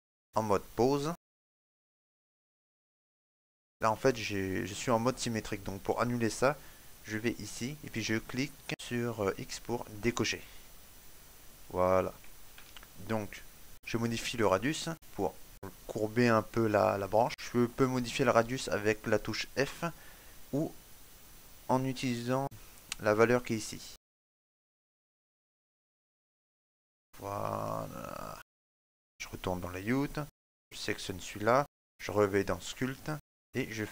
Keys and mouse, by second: 32.2 click, 33.4 right click.